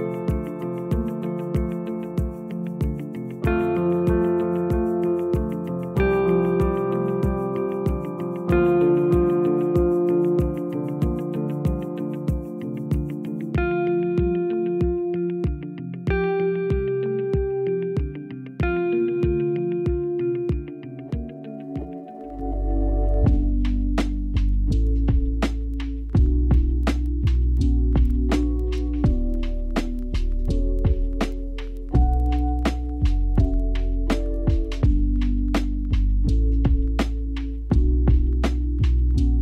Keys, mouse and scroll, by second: 4.6 shift+d, 6.9-7.9 drag, 7.9-9.8 scroll up 4, 9.8 r, 12.4 s, 17.7-18.0 scroll up 4, 18.0 Tab, 19.2 g, 24.6 Tab, 26.4 shift+d, 27.6-30.4 right drag, 30.4 g, 34.3 click, 35.9-36.5 scroll down 2, 36.5-37.1 scroll down 8, 37.1-38.1 scroll down 2, 38.1 shift+a.